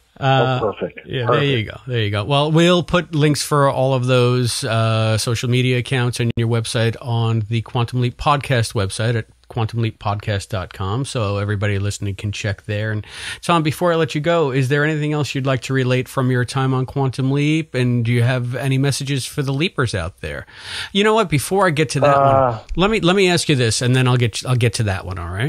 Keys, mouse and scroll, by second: 3.4-6.0 drag, 6.2 Delete, 7.3 click, 8.1 click, 8.7 ctrl+s, 10.1 click, 11.6 click, 15.0 click, 15.4 click, 16.1 click, 16.8 ctrl+s, 18.3 click, 22.4 click, 23.4 click.